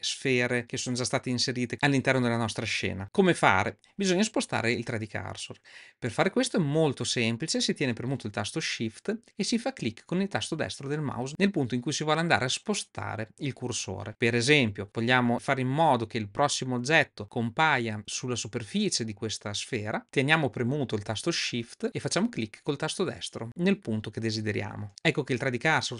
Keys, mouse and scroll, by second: 24.8 shift+right click.